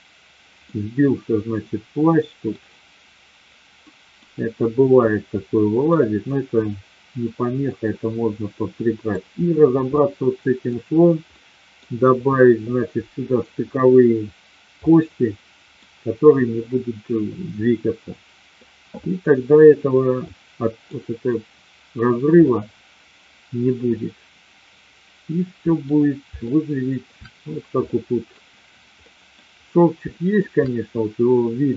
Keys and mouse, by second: 0.6-2.4 middle drag, 3.8 middle drag, 4.7-5.9 middle drag, 7.7-9.2 middle drag, 9.9 middle click, 11.3-11.8 middle drag, 14.9-15.7 middle drag, 20.2-20.9 middle drag, 22.4-25.8 middle drag, 26.4 shift+middle click, 27.9-28.3 middle drag, 29.0 middle click, 30.2 shift+middle drag.